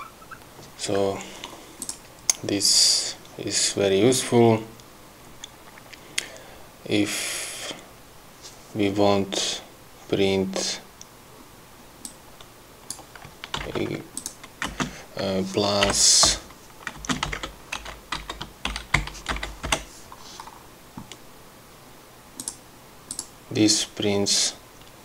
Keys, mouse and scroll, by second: 2.0 click, 12.2 click, 13.8 ctrl+x, 14.4 ctrl+click, 14.9 ctrl+space, 16.1 BackSpace, 17.2 space, 17.5 ctrl+v, 18.0 ctrl+Home, 18.4 ctrl+Down, 18.9 ctrl+shift+End, 19.5 shift+Delete, 19.9 BackSpace, 22.6 click, 23.3 click.